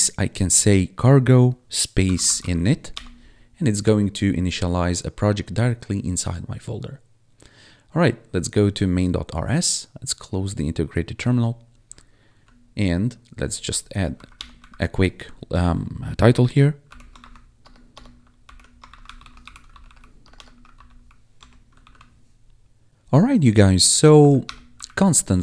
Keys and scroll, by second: 1.7-2.8 typing, 2.9 Return, 14.1 Left, 14.3 Return, 14.5 Up, 16.8 /, 17.1 shift+c, 17.5 BackSpace, 18.4 ctrl+/, 18.6-21.3 typing, 21.7 ctrl+s, 24.1 Up, 24.4 Return, 24.7 Up, 25.3 Tab.